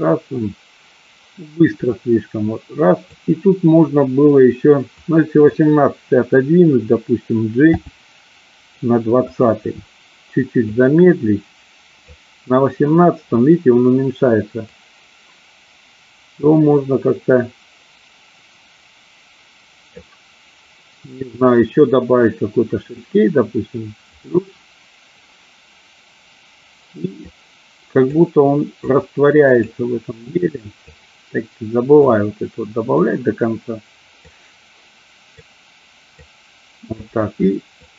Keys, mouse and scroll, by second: 4.8-5.4 drag, 7.7 g, 9.4 click, 10.8-12.4 drag, 14.7-20.2 drag, 24.1 click, 27.4 click, 28.9 click, 30.7 click, 32.0 click, 34.4-35.7 drag, 36.3 click.